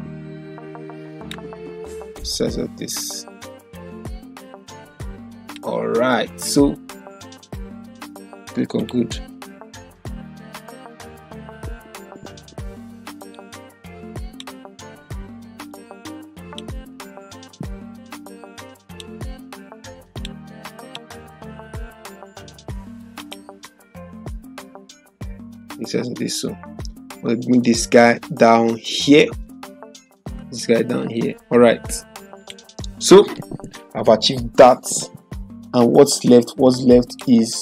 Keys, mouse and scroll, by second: 8.8 click, 10.4 ctrl+-, 13.3-14.6 shift+drag, 21.9 ctrl+0, 23.2 click, 32.4 click, 37.1 click, 37.3 click.